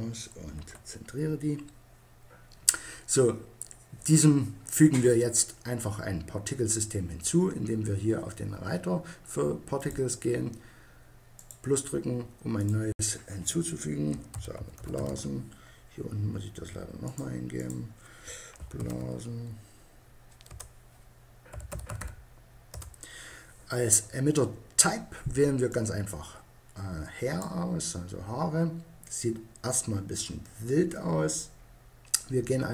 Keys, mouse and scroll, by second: 0.0 KP_Decimal, 9.2-13.8 drag, 16.9-18.8 drag, 25.1-26.9 drag.